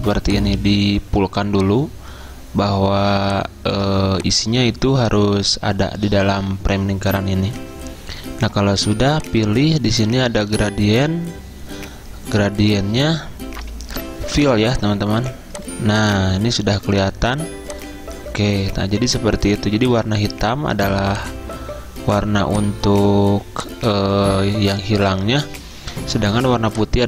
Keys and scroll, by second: 14.1 ctrl+z.